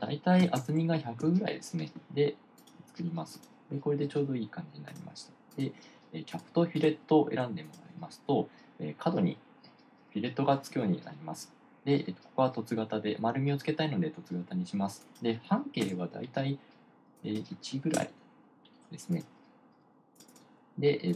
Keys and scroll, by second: 0.6-1.7 typing, 16.2 1, 18.4 1.